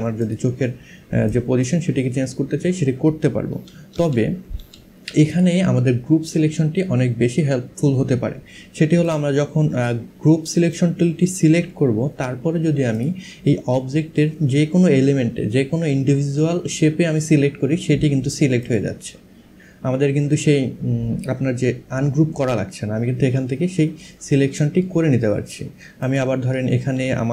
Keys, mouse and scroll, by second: 3.1 ctrl+z, 4.9 click, 8.7 click, 10.3 click, 12.5 click, 18.3 click, 24.2 click, 25.7 click.